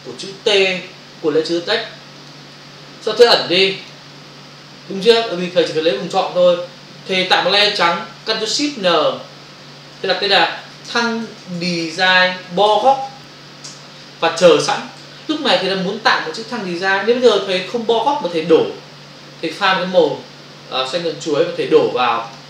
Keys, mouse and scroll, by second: 2.2 ctrl+click, 3.8 click, 11.6-12.1 typing, 13.6 Return, 20.0 click, 21.1 click.